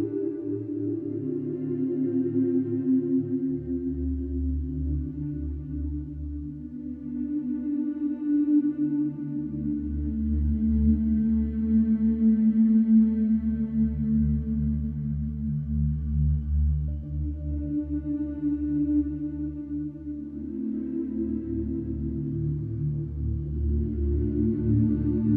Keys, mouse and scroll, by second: 0.5 click, 8.9 click, 11.6 click, 12.8 click, 14.2 click, 15.8 g.